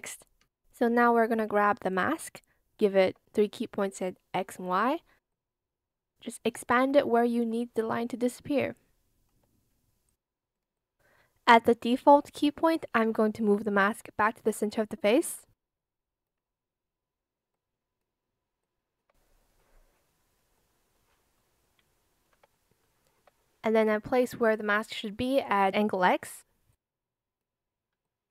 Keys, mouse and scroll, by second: 1.3 ctrl+z, 5.2 shift+click, 7.0 shift+click, 8.0 alt+shift+click, 12.4 shift+click, 13.5 shift+click, 18.5 shift+click, 21.5 shift+click, 23.8 click, 27.9 shift+click.